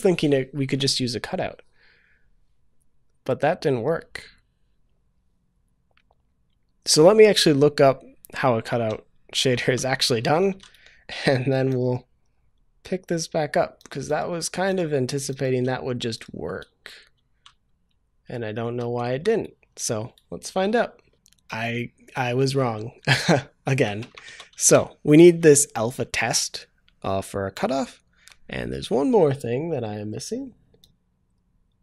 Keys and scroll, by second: 24.3 ctrl+v, 24.5 ctrl+s.